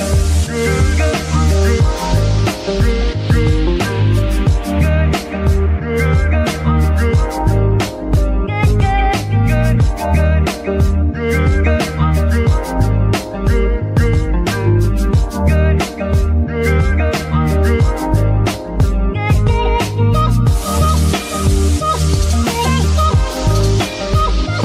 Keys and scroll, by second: 1.5 r, 3.5 Escape, 10.7 ctrl+Tab, 13.2 F2, 14.4 i, 15.3 -, 17.1 o, 23.6 ctrl+Tab.